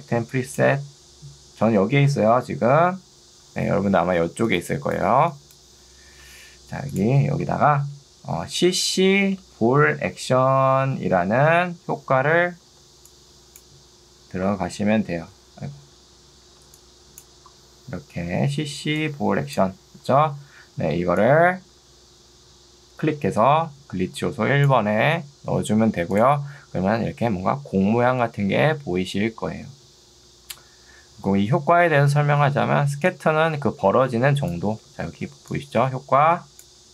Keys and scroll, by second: 6.2 Escape, 7.6 e, 8.2 BackSpace, 9.4-11.1 typing, 12.8 ctrl+2, 16.0 Escape, 16.6 ctrl+2, 20.2 Escape, 34.8 ctrl+z, 35.4 ctrl+2.